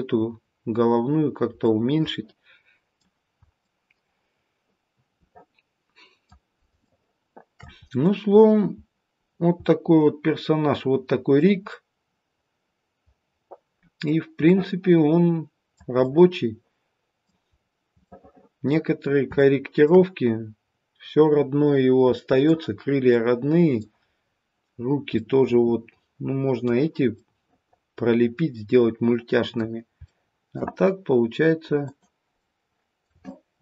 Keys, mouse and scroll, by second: 0.7-1.4 scroll down 4, 1.6 middle click, 3.5 middle click, 7.5 shift+middle click, 7.9 middle click, 8.3-8.8 scroll up 1, 8.8-9.2 scroll down 1, 9.2-10.8 scroll down 2, 9.5 middle click, 11.7 middle click, 14.8 middle click, 15.9 middle click, 17.5-18.9 scroll up 3, 18.0 middle click, 18.9 scroll down 2, 19.3 shift+middle click, 21.7-22.1 scroll down 2, 22.1 middle click, 23.1 middle click, 24.1-24.8 scroll up 1, 24.8 scroll down 1, 25.1 middle click, 27.1 middle click, 30.0 shift+middle click, 31.8 click, 32.3 middle click.